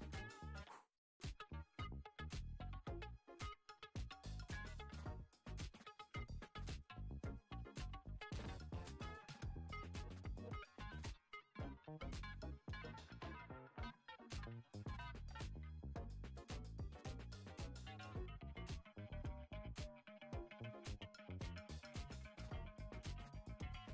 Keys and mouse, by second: 0.6-1.3 drag, 3.4-3.9 drag, 4.4 Tab, 4.9 a, 6.1 ctrl+a, 12.1 Tab, 14.9 Tab, 15.8 Tab, 16.4 g, 18.9 shift+d, 21.0-23.7 right drag.